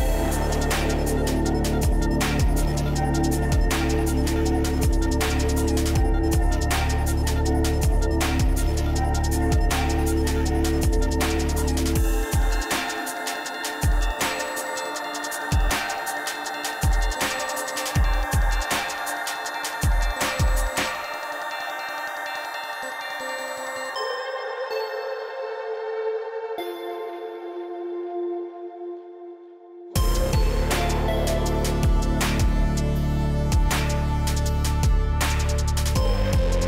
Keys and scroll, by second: 7.2 ctrl+t, 16.9 Right, 29.1 Left, 30.3 Down, 35.0 Return.